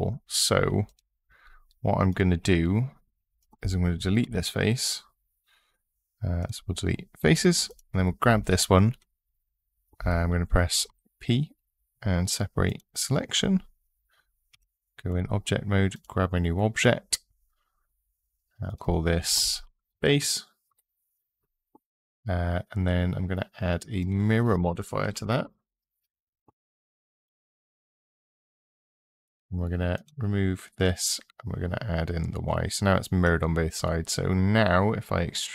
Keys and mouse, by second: 0.6 click, 3.2 click, 4.0 Delete, 10.7 p, 14.3 Tab, 14.9 click, 15.8 click, 18.6-20.5 drag, 23.8-27.0 drag, 25.3 r, 29.7 click, 30.8 click.